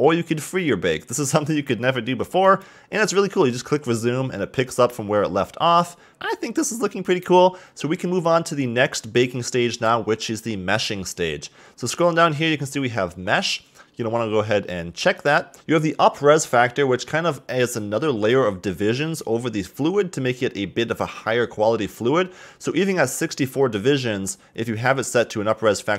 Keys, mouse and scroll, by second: 2.4-6.1 drag, 9.2-10.9 drag, 10.9-13.0 scroll down 16, 13.3-15.2 scroll down 2, 15.2 click, 22.8-25.6 scroll up 4.